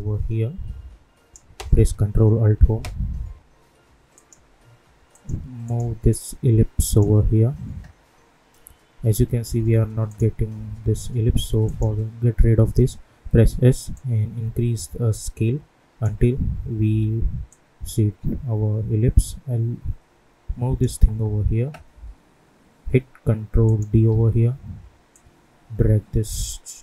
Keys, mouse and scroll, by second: 2.3 ctrl+alt+Home, 4.1-10.0 drag, 13.3 s, 13.9-16.8 drag, 16.8 v, 17.4-23.6 drag, 24.0 ctrl+d, 25.1-26.8 drag.